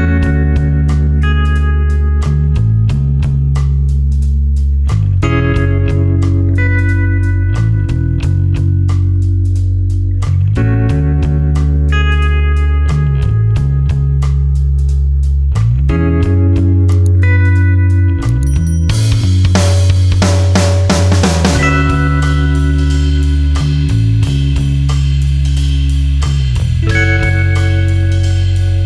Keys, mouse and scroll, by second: 3.7 click, 4.0 ctrl+a, 4.8-6.5 typing, 11.0 click, 14.5 click, 20.2 click, 20.8 space, 21.3 ctrl+alt+click, 23.3 click, 24.8 space, 25.4 click, 28.6 click.